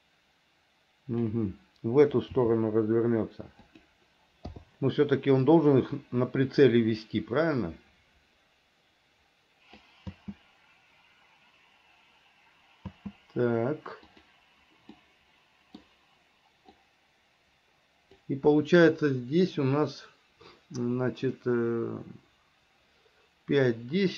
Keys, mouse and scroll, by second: 2.6 r, 4.7 i, 5.7-10.0 drag, 10.3 space, 13.1 space, 14.3 click, 15.2 middle click, 16.9-18.4 drag.